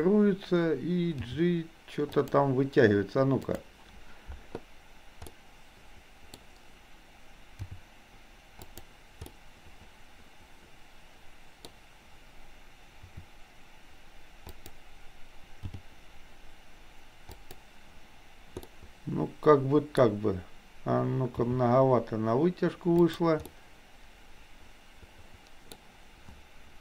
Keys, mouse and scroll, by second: 1.3 g, 3.5 click, 5.4 middle click, 7.8 g, 9.3-10.6 scroll up 1, 10.6-11.6 middle drag, 13.1 r, 15.6 g, 18.8-20.0 middle drag, 21.5 g, 23.5-25.8 middle drag.